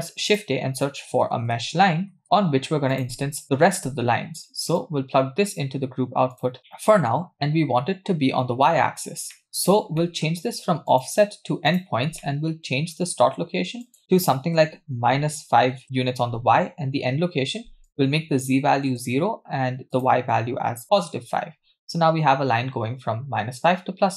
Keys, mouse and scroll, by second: 4.8 click, 6.6 click, 9.3 middle click, 9.5-9.9 scroll up 2, 10.0 middle click, 10.3-10.9 scroll up 2, 10.9-11.9 drag, 12.2 middle click, 13.9-15.8 drag, 17.9-18.9 drag, 19.9-21.0 drag.